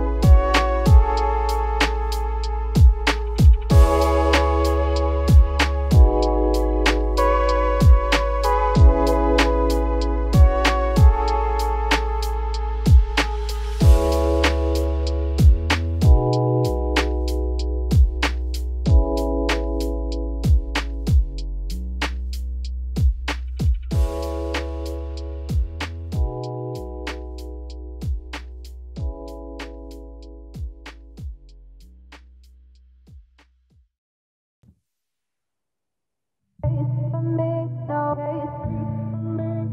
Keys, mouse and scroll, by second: 0.0 z, 0.5 1, 1.0 click, 2.2 z, 3.1 z, 3.7 click, 4.3-8.0 typing, 6.7 click, 7.6-8.0 scroll up 3, 10.8-11.2 scroll up 3, 11.2 click, 11.8-12.4 scroll up 4, 12.4 scroll up 1, 12.5 alt+click, 13.6 ctrl+KP_Add, 14.3-14.9 scroll down 6, 14.9 x, 15.8-16.3 scroll up 1, 16.3 z, 16.7 click, 17.2 z, 17.6-18.4 scroll down 2, 18.4 s, 20.7 scroll down 3, 20.8 middle click, 21.8 scroll up 1, 21.9 Tab, 22.2 middle click, 22.5-23.2 scroll up 3, 22.8 shift+middle click, 23.2-24.3 middle drag, 24.3 click, 24.7 alt+click, 25.6 x, 28.0 f, 28.8 ctrl+z, 29.4 x, 30.6 click, 30.9 alt+click, 31.6 alt+click, 32.1 alt+click, 33.2 f, 33.6 Tab, 34.2 ctrl+s, 34.4 scroll down 2, 34.6 middle click, 35.2 scroll down 1, 35.3 middle click, 36.0-36.6 scroll up 2, 36.6 Tab, 37.1-37.4 scroll up 1, 37.4 middle click, 37.9 Tab, 38.2-38.8 middle drag, 38.8 `, 39.6 ctrl+s.